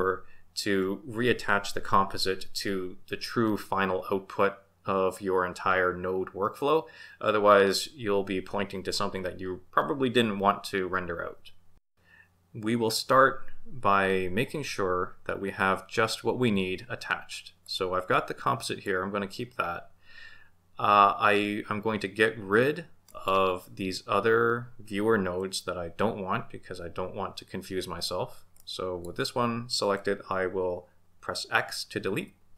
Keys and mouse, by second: 17.7 click, 18.5 click, 23.1 click, 28.6-29.1 drag, 32.2 x.